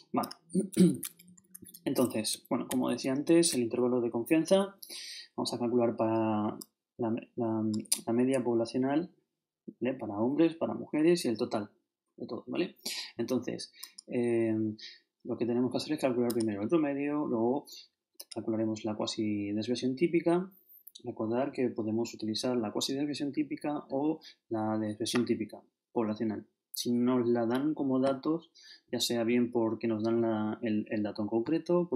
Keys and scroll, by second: 1.3 shift+super+Up, 2.3 ctrl+shift+Up, 2.7 ctrl+shift+Right.